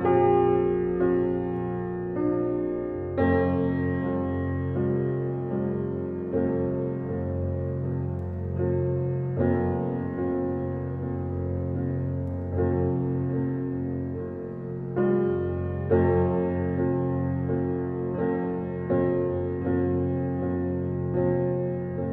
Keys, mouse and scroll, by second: 0.1 scroll down 1, 2.9-3.2 scroll up 1, 4.7 click, 5.0-5.3 scroll down 1, 6.2 scroll up 1, 7.1-7.5 scroll down 1, 8.8 scroll up 1, 9.9-10.8 scroll down 1, 10.8 scroll up 1, 13.2 scroll down 1, 13.7-14.5 scroll up 1, 14.6 scroll down 1, 15.9-17.8 scroll up 1.